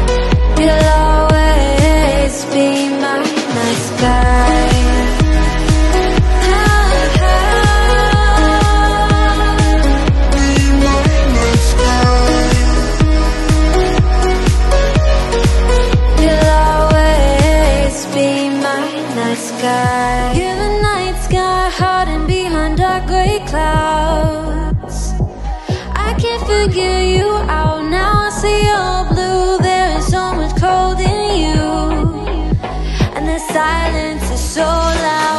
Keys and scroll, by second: 0.1 shift+Up, 3.7 space, 8.2 super+a, 8.7 shift+super+k, 20.0 g.